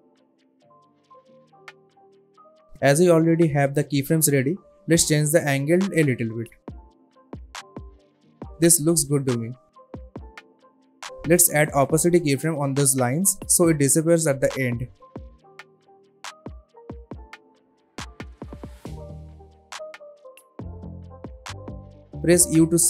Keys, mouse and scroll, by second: 7.1 space, 9.3-9.8 click, 10.2 shift+click, 11.2 t, 12.3-14.2 drag, 18.5 space, 20.8 click, 22.6 u.